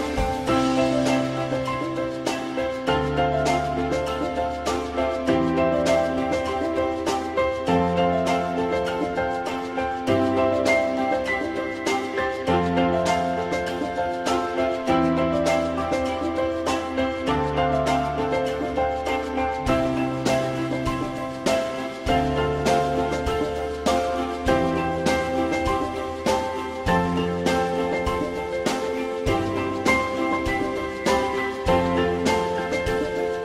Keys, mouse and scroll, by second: 1.5 ctrl+click, 2.1 ctrl+click, 12.2 click, 15.4 shift+click, 19.7 click, 24.5 alt+x.